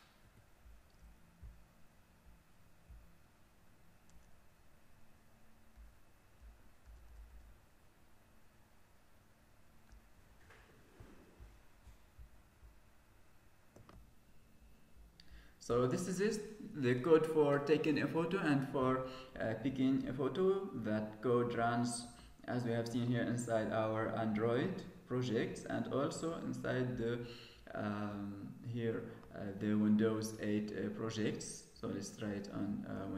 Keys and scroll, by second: 0.1 Escape.